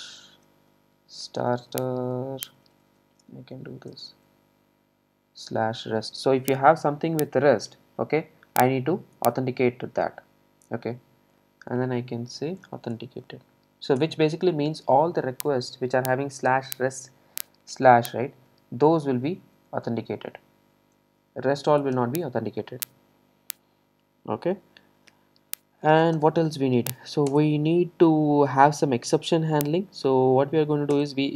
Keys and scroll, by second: 14.0 Return, 26.2 Return, 31.0 Return.